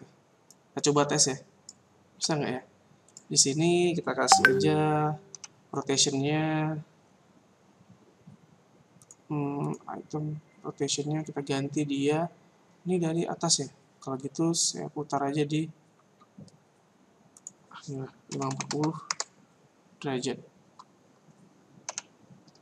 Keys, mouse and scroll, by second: 0.5 click, 1.8 click, 3.1 right click, 5.3 n, 9.1 click, 9.6 click, 17.4 click.